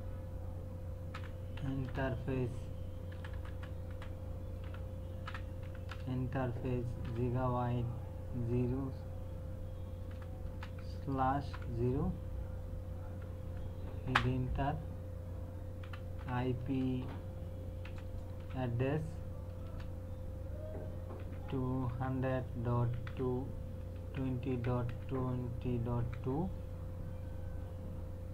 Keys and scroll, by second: 0.9-2.1 typing, 3.1 BackSpace, 4.6-7.0 typing, 8.3 KP_0, 10.1-12.3 typing, 14.1 Return, 15.6-16.7 typing, 17.8-18.4 typing, 19.6 space, 21.2 KP_2, 21.5 KP_0, 22.3 KP_Decimal, 22.8 KP_2, 24.1 KP_Decimal, 24.3 KP_2, 24.9 KP_Decimal, 26.0 KP_2.